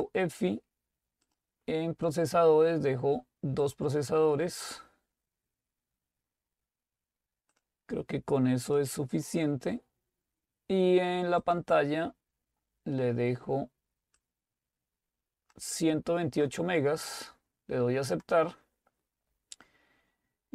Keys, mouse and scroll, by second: 0.4 click, 1.2 click, 3.6-4.7 drag, 7.5-10.1 drag, 11.4 click, 14.2-17.0 drag, 18.4 click.